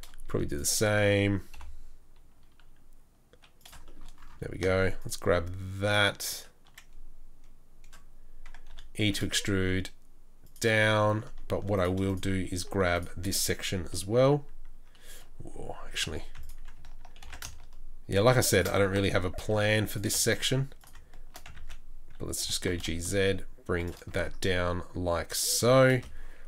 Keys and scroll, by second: 1.5 i, 8.6 e, 9.3 e, 16.1 2, 17.2 ctrl+b, 18.9 3, 19.4 3, 21.6 ctrl+z, 22.4 g, 24.1 Tab, 25.9 space.